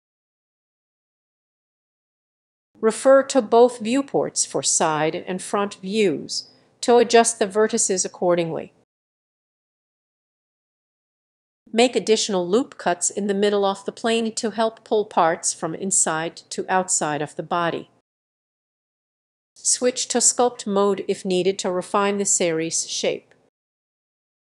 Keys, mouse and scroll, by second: 0.0-1.0 drag, 1.2 click, 1.7-4.7 typing, 2.1 click, 2.6 click, 3.6 click, 4.3 click, 4.6 middle click, 5.0 click, 5.7 g, 6.1 click, 6.4 g, 7.0 click, 7.2 g, 7.8 click, 8.0 g, 8.4 click, 8.7 middle click, 9.1 click, 9.5 g, 10.1 click, 10.3 middle click, 11.0 click, 11.4 middle click, 12.6-15.9 drag, 16.9 click, 17.6 middle click, 18.0 x, 18.2-21.2 drag, 21.2 middle click, 21.7-23.8 drag, 23.8 middle click.